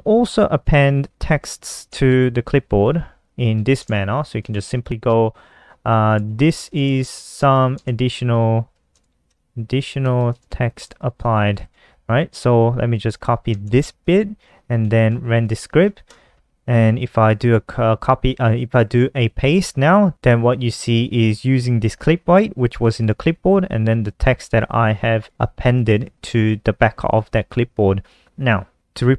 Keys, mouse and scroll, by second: 1.0 shift+super+Right, 2.2 click, 2.7 Down, 2.9 End, 3.7-4.1 typing, 5.4-9.3 typing, 11.7 click, 12.7 ctrl+shift+Left, 12.8 ctrl+shift+Left, 13.1 ctrl+c, 14.2 ctrl+s, 14.5 F5, 15.3 super+n, 16.2 click, 18.8 ctrl+v, 23.4 click, 25.0-25.8 typing, 25.4-26.5 scroll down 5, 26.5 click, 28.7 alt+F4.